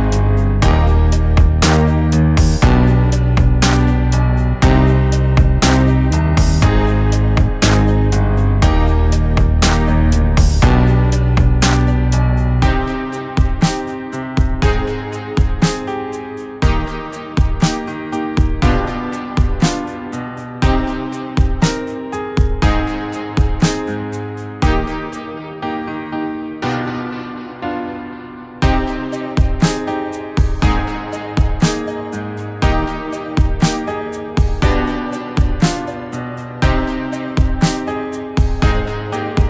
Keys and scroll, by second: 13.9 [, 15.7 ctrl+z, 17.5 ctrl+z, 17.8 ], 18.4 ctrl+z, 19.2 ctrl+z, 20.9 ctrl+z, 22.5 ctrl+z, 22.5 [, 22.9 ctrl+z, 23.3 [, 23.4 [, 25.2 ctrl+z, 25.2 ], 25.7 ], 27.7 ctrl+z, 29.5 ctrl+z, 30.8 ctrl+z, 32.6 ctrl+z, 34.5 ctrl+z, 35.9 ctrl+z, 37.5 ], 37.5 ], 39.2 ctrl+z, 39.3 [.